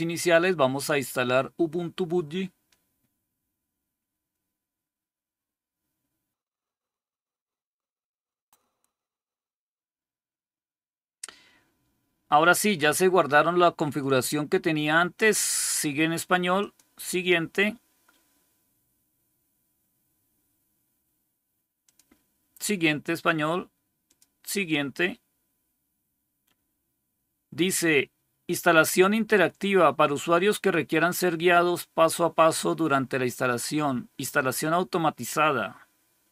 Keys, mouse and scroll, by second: 13.9-15.2 drag, 16.5 click, 21.7 click, 24.0 click.